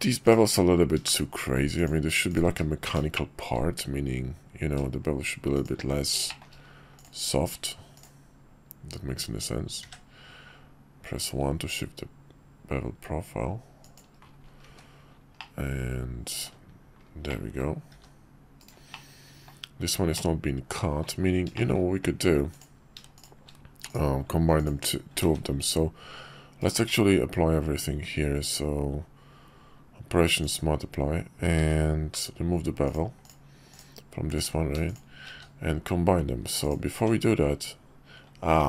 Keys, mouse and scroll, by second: 2.4 q, 6.3 shift+middle click, 6.9 click, 7.4 q, 15.4-16.5 middle drag, 17.3-17.6 middle drag, 17.9 g, 18.9 middle click, 20.1 middle click, 21.5 shift+click, 22.5 click, 24.5 click, 25.2 ctrl+`, 26.8 q, 31.6 ctrl+`, 33.7 click, 34.3 click, 34.9 shift+click, 35.3 q, 36.9 Tab.